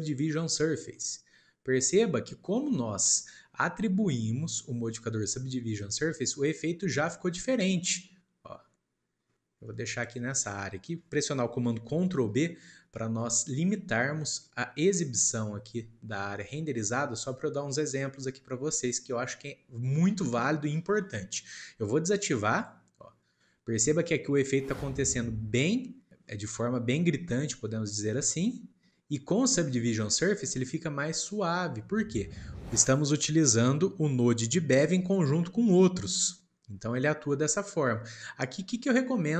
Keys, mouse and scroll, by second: 0.1 click, 0.9-4.0 middle drag, 5.8-6.3 scroll down 1, 6.3-12.7 middle drag, 12.7 ctrl+b, 29.6 click.